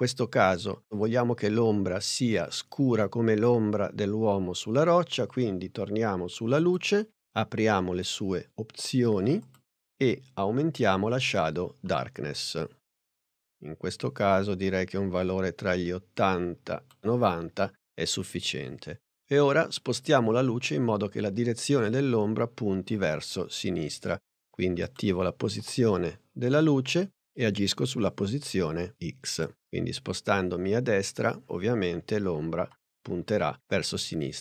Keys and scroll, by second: 25.7 p.